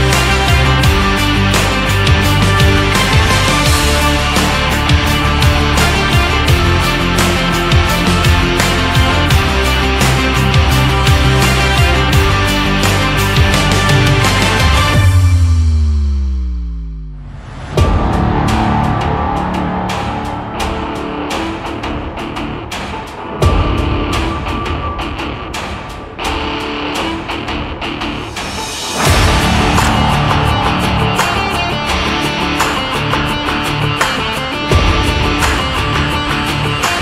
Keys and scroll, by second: 0.5 ctrl+z, 2.0 Left, 4.1 ctrl+z, 7.1 Right, 21.4 shift+x, 36.9 BackSpace.